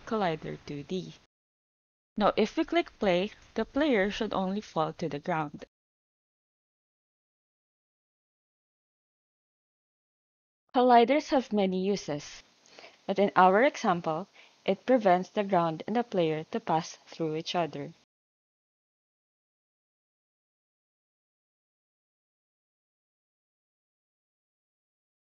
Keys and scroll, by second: 13.1 Down, 13.7 Return.